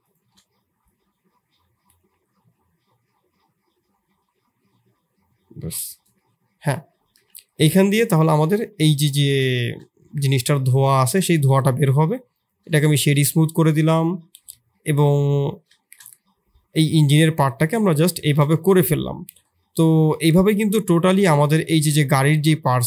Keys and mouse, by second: 6.6 middle click, 7.1 Tab, 8.1 middle click, 8.7 middle click, 9.5 shift+click, 11.2 shift+drag, 12.0 click, 12.7 shift+middle drag, 13.0-14.0 middle drag, 14.7 shift+middle drag, 15.1 middle drag, 15.8 shift+middle click, 16.1-17.2 middle drag, 18.5 shift+drag, 18.8 middle drag, 20.0-20.3 middle drag, 20.6 middle drag, 21.2 shift+drag, 21.6 middle drag.